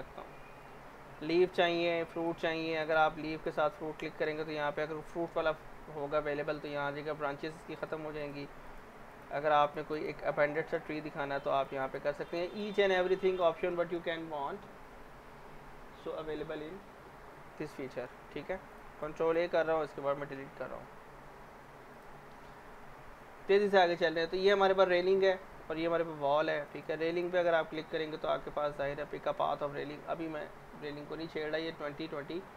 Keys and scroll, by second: 19.9 Delete, 20.2 z.